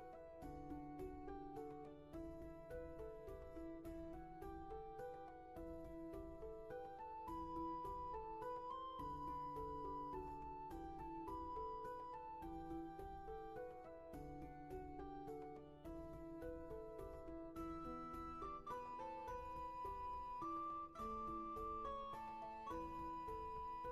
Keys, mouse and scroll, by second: 4.2 ctrl+z, 13.1 ctrl+z, 15.3 ctrl+z.